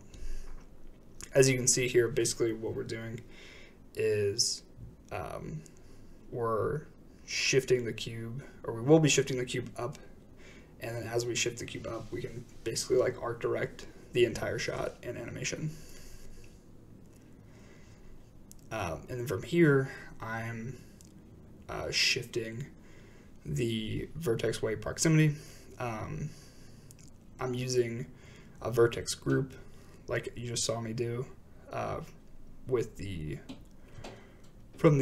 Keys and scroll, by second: 0.0-0.7 typing, 2.8-3.6 typing.